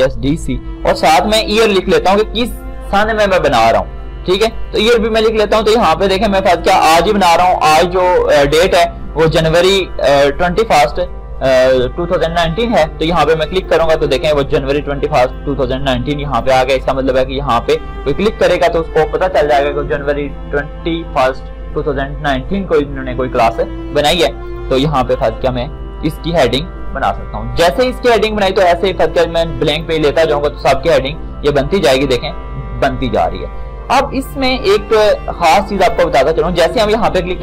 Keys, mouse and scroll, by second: 2.5 click, 13.9 click, 16.7 click, 24.7 click, 26.7-27.5 scroll up 1, 29.9 click, 34.2-36.0 scroll down 1, 36.0 click.